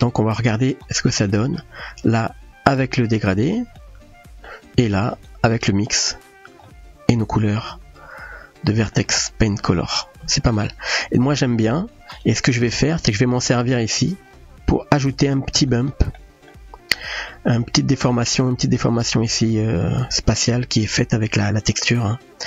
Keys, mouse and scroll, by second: 1.4 middle click, 3.8-4.5 middle drag, 6.7-9.0 middle drag, 9.3-9.6 shift+middle drag, 11.8-12.2 drag, 12.8 click, 13.5 middle click, 15.2-15.7 drag, 16.1 middle click, 17.3 middle click.